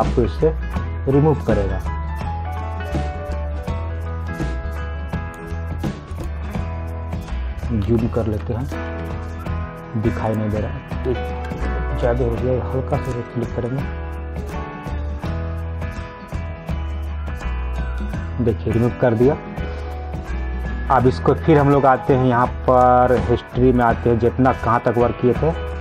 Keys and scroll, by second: 11.5 ctrl+z.